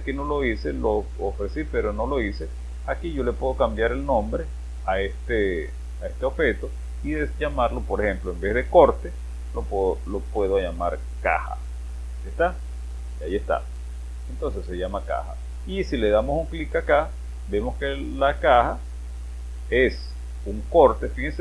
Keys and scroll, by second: 10.1-12.0 typing.